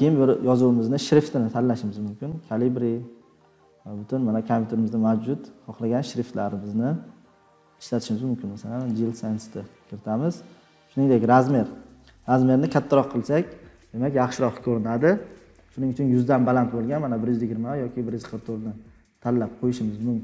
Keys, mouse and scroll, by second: 1.2 click, 1.9 click, 9.1 click, 11.4-11.9 drag.